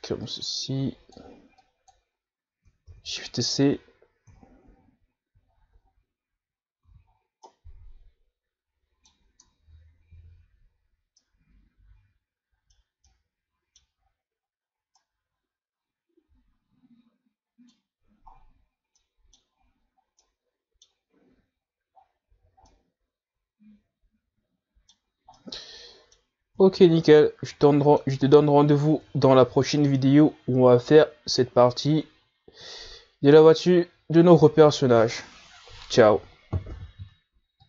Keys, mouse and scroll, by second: 2.9-4.1 drag, 4.1 shift+c, 4.8-5.5 scroll up 3, 5.6-6.0 scroll down 3, 6.1-6.7 scroll up 3, 6.7-8.1 scroll up 4, 8.1 z, 8.4 scroll down 3, 8.7 scroll up 1, 8.7-10.6 middle drag, 10.6 Tab, 11.4 a, 12.0-12.4 scroll down 4, 12.4-15.2 middle drag, 15.2-15.6 scroll up 6, 16.0 scroll down 1, 16.2-19.6 middle drag, 19.6-20.2 scroll down 5, 20.2-20.7 middle drag, 20.7-21.5 scroll up 5, 21.5-23.2 middle drag, 23.2-23.9 scroll down 8, 23.9-28.0 middle drag, 28.0-28.4 scroll down 2, 28.4-30.0 middle drag, 30.0-30.8 scroll down 3.